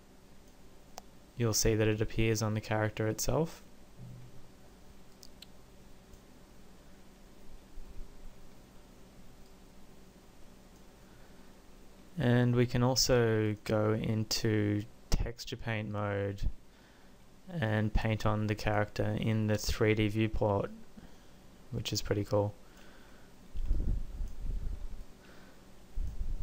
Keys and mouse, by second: 1.6 click, 5.2-7.0 drag, 17.8-19.7 drag, 23.9 click.